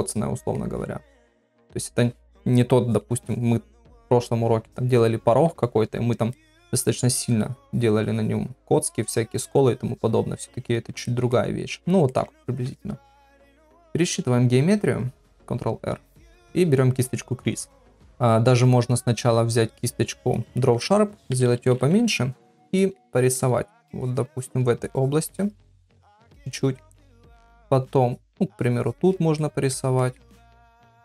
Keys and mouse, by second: 1.2 middle click, 6.4 ctrl+middle click, 7.3-10.7 drag, 11.1 ctrl+middle click, 11.3 middle click, 12.1 ctrl+middle click, 15.4 ctrl+r, 19.8 click, 20.5 middle click, 21.3-22.1 [, 22.8 middle click, 23.1 middle click, 24.0 click, 24.8 click, 25.3 click, 26.2 ctrl+middle click, 26.5 middle click, 28.1 click, 28.6 click, 29.0 click, 29.4 middle click, 30.0 ctrl+middle click.